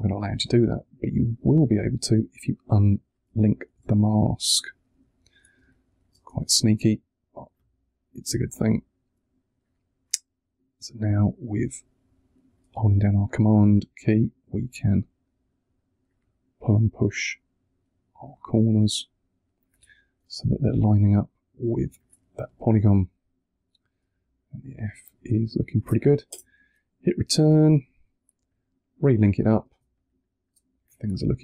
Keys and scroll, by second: 3.6 super+t, 5.5 space, 26.2 Return, 29.6 space.